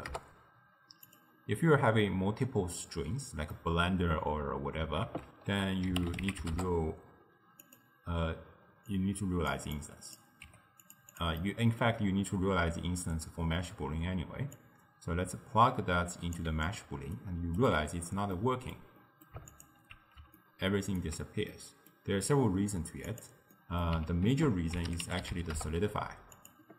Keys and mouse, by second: 3.6-5.1 middle drag, 5.1 ctrl+a, 8.9 click, 9.8 click, 10.5 g, 11.2 click, 11.4-14.6 middle drag, 14.6 click, 17.2 ctrl+right click, 18.4-19.8 middle drag, 19.8 alt+shift+click, 20.4-23.3 ctrl+middle drag, 23.3 click, 23.6 middle click, 24.3 ctrl+a.